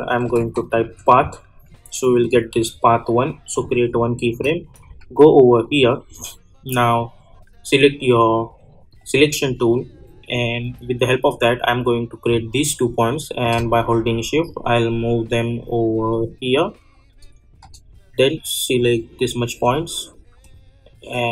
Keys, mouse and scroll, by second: 0.0-1.3 typing, 2.2 click, 4.8 j, 8.9-21.3 drag.